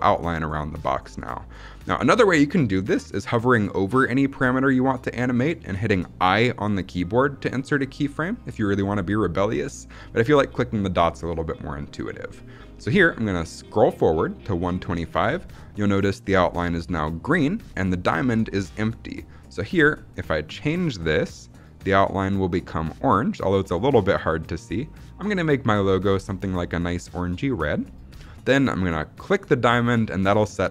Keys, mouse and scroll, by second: 13.4-14.6 drag, 19.4 click, 29.1 click.